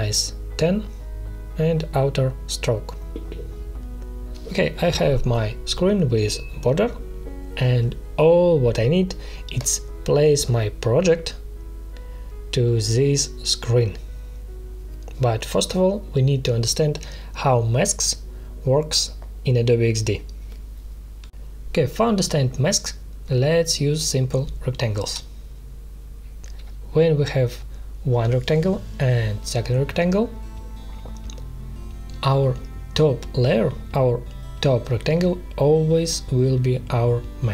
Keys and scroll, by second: 1.4 1, 2.1 Return, 10.3 ctrl+z, 10.9 space, 16.8 ctrl+z, 17.7 space, 21.2 space, 33.5 ctrl+shift+].